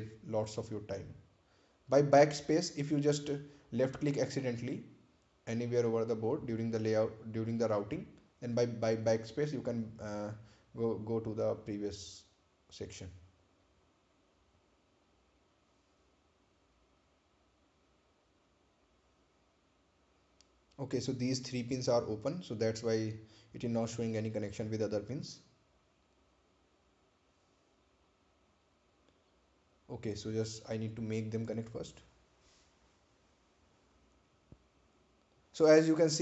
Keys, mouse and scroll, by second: 4.8 BackSpace, 13.0 click, 14.3-16.1 scroll down 1, 16.5 right click, 19.2 ctrl+click, 20.5 ctrl+click, 21.8 ctrl+click, 22.7 ctrl+click, 25.1 ctrl+click, 27.5 ctrl+click, 28.3-29.9 scroll down 1, 29.9 click, 30.0 click, 31.4-31.8 scroll up 1, 34.8-35.6 scroll up 1.